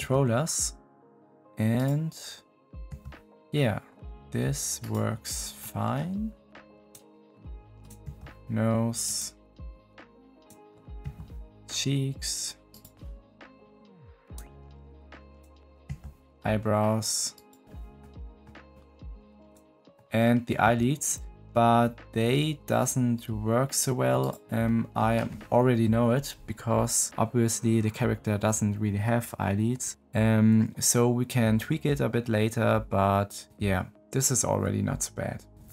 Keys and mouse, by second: 2.6 click, 2.8 g, 5.5 drag, 5.7 middle click, 6.5 click, 8.0 g, 10.3 click, 11.0 g, 13.6 click, 14.1 middle click, 15.8 g, 17.9 drag, 18.1 middle click, 19.9 click, 20.6 g, 24.6-24.9 middle drag.